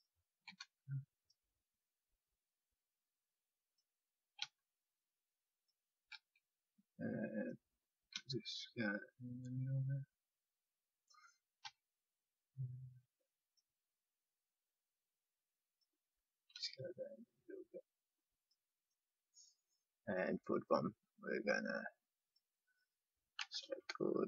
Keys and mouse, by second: 0.4 e, 4.3 s, 6.1 e, 8.1 s, 11.6 e, 15.1 e, 15.2-17.7 drag, 16.5 s, 23.3-24.2 drag, 23.3 c.